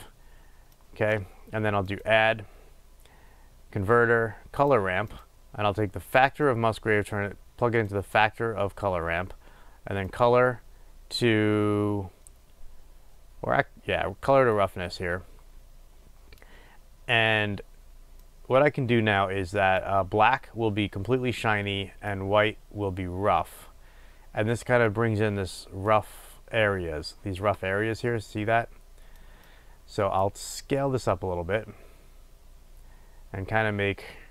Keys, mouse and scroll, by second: 0.0-6.8 drag, 18.5-28.6 drag, 30.8-34.3 drag.